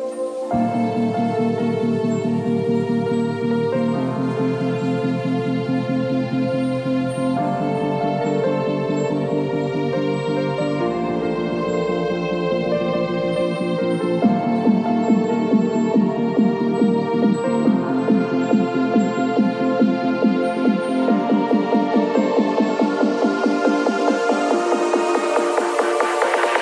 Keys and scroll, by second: 0.9 ctrl+alt+d, 2.0-3.6 typing, 4.6 ctrl+shift+i, 5.4 Delete, 8.3 ctrl+d, 8.5 v, 15.1 Delete, 15.8 space, 19.1 b.